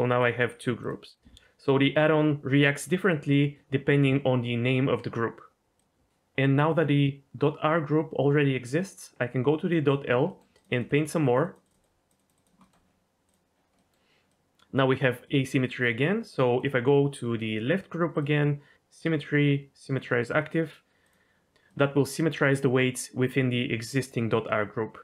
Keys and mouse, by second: 10.2 middle click, 10.5 click, 10.8 click, 11.0 click, 11.2 click, 11.6 click, 12.2 click, 12.3 click, 12.6 middle click, 13.2 click, 13.7 middle click, 14.3 middle click, 15.2 middle click, 16.5-20.0 drag, 20.4 middle click, 21.0 click, 21.6 middle click.